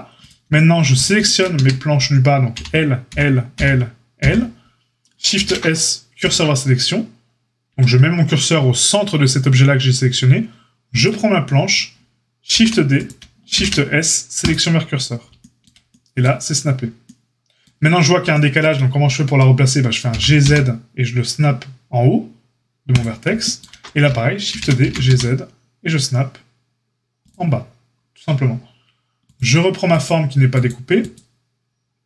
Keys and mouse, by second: 0.1 click, 0.2-29.9 shift+middle drag, 1.5 Tab, 2.5 l, 3.0 l, 3.5 l, 4.1 l, 5.3 shift+s, 7.6 Tab, 12.5 shift+d, 13.5 shift+s, 20.0 g, 24.4 shift+d, 29.9-30.6 drag, 30.6 middle click, 30.9 click, 31.1-32.0 middle drag.